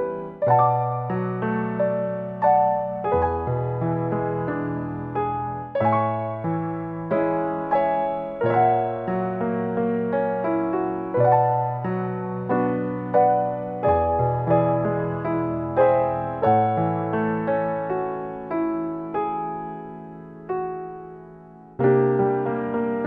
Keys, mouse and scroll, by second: 0.6-1.1 scroll up 6, 1.1 click, 1.4-2.3 scroll down 12, 1.9 middle click, 2.3 middle click, 3.9-4.5 scroll up 5, 4.1 middle click, 4.9 click, 6.2 click, 8.6 click, 9.1 click, 10.9 click, 12.0 click, 12.7 click, 14.4 click, 15.9 click, 16.1 click, 17.0 click, 17.3 click, 18.6-19.2 scroll down 4, 19.0 scroll up 1, 19.6 middle click, 19.9 click, 20.5 Delete, 20.7 scroll down 2, 20.9 middle click, 21.9 click, 22.9 ctrl+shift+d.